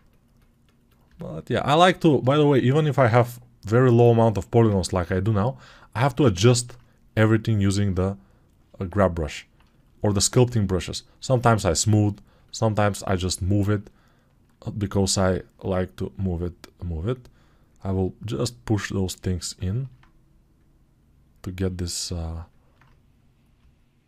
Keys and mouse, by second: 14.8 alt+q.